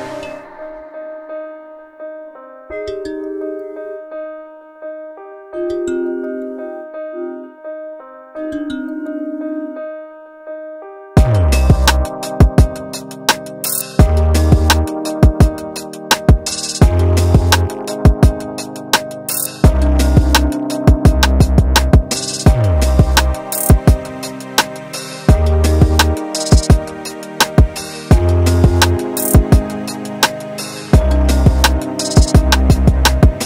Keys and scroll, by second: 0.6 F1, 3.6 Delete, 4.0 ], 7.4 4, 12.1 3, 21.0 ], 24.0 ], 30.0 ], 30.5 ], 32.0 4.